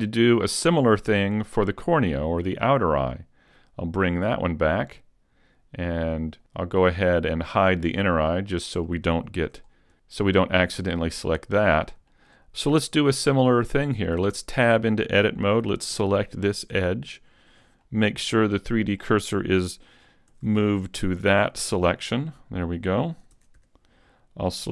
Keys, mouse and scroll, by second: 4.3 click, 6.2 click, 8.3 middle click, 9.2 shift+middle click, 9.7-11.0 scroll up 2, 11.6 middle click, 12.1 shift+middle click, 14.0 right click, 14.4 Tab, 16.4 alt+right click, 17.8 middle click, 20.3 shift+s, 22.0 middle click, 23.4 ctrl+Tab, 24.5 right click.